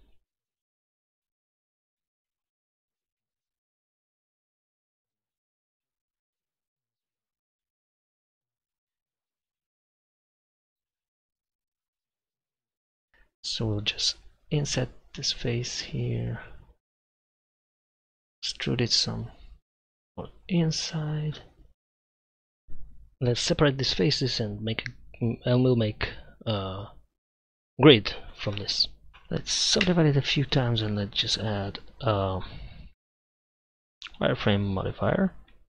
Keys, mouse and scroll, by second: 0.2 Tab, 0.2-1.1 drag, 1.9 g, 2.4-4.0 drag, 5.8 KP_1, 5.9 KP_5, 6.6 click, 7.4 shift+s, 9.0 Tab, 9.5 Tab, 10.0 KP_0, 11.3 KP_5, 12.7 click, 14.6 i, 18.3 e, 22.8 right click, 23.0 KP_Divide, 23.8 Tab, 24.4 a, 25.6 w, 26.6 w, 27.5 w, 29.9 Tab.